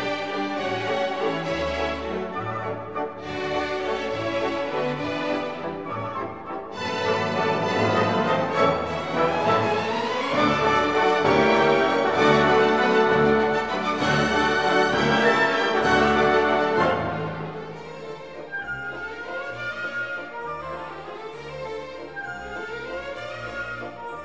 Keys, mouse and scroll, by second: 0.4 ctrl+z, 0.7 ctrl+z, 0.8 middle click, 1.2 g, 2.1 shift+z, 2.2 shift+middle click, 2.4 middle click, 3.4 click, 4.4 click, 5.1 click, 6.3 click, 7.0 click, 9.0 shift+middle click, 10.0 click, 11.4 click, 11.8 click, 13.2 shift+a, 15.8 ctrl+a, 17.4 shift+middle click, 19.5 click, 20.1 click, 21.4-23.0 drag, 23.2 middle click, 24.0 KP_7.